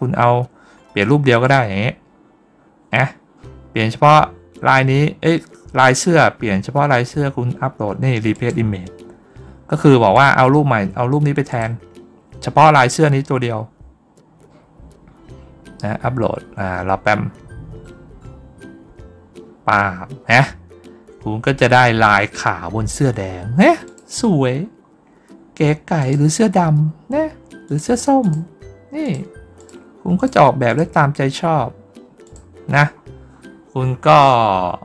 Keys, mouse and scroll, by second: 0.5 scroll down 1, 1.3 click, 1.9 middle click, 3.1 middle click, 5.2 middle click, 6.7 middle click, 8.2 click, 10.0 click, 11.3 click, 12.9-14.9 scroll up 4, 17.4-17.8 scroll up 2, 20.1-20.7 scroll down 2, 23.7 click, 24.3 scroll down 2, 25.8 click, 27.5 click, 28.1 click, 28.9 click, 29.4 click, 30.0 click, 30.5 click, 32.1 click, 32.8-33.2 scroll down 1, 33.2-33.5 scroll up 1, 34.4-34.8 scroll up 1.